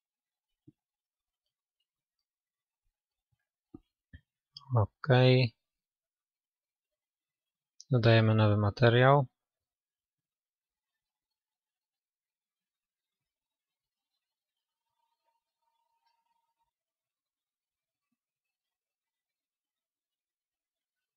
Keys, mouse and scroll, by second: 0.0-1.6 drag, 1.6-7.3 middle drag, 7.3-21.1 drag.